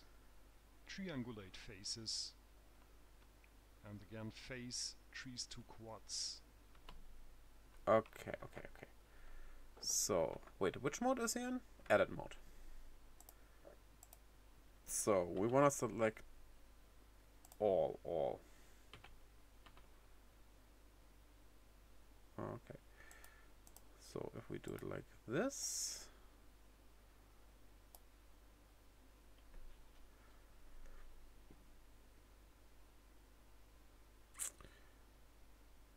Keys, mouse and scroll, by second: 4.2 click, 11.0 click.